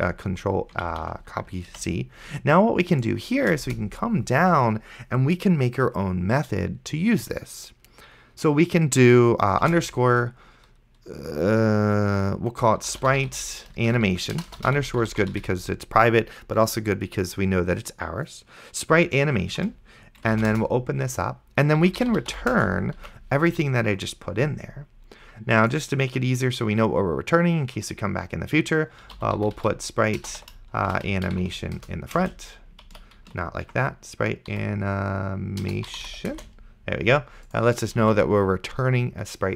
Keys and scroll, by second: 0.0 ctrl+x, 1.2 ctrl+z, 2.0 ctrl+c, 3.6 Return, 10.0 shift+-, 12.6-16.2 typing, 19.3-20.3 typing, 20.5 Return, 21.6-22.8 typing, 23.3 ctrl+v, 29.0-32.2 typing, 33.2 ctrl+z, 34.5-36.6 typing, 38.3 ctrl+s.